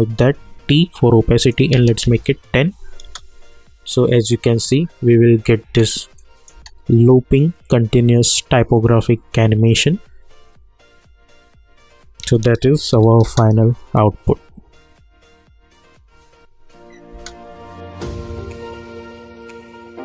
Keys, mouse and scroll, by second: 0.3 t, 1.4 click, 2.0 Return, 3.0 space, 5.6 space, 6.2 click, 6.5 space, 12.2 space, 12.9 n, 13.2 space, 17.1 space.